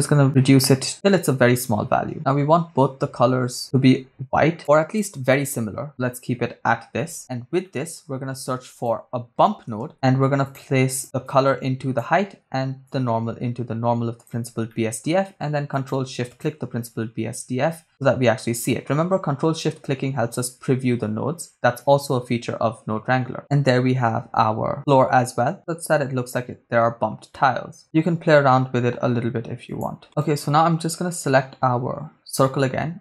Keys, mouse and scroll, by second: 1.3 shift+middle click, 3.6 click, 7.2-7.7 scroll down 3, 7.7 middle click, 8.4 shift+a, 11.3-12.0 drag, 12.9-14.4 drag, 14.7 middle click, 15.8 ctrl+click, 16.7 ctrl+shift+click, 17.3-19.0 scroll down 3, 23.4 middle click, 27.3 middle click, 27.8-28.9 scroll up 5, 28.9-29.7 scroll up 1, 29.7 click, 30.5 click, 30.5 right click, 32.4 middle click.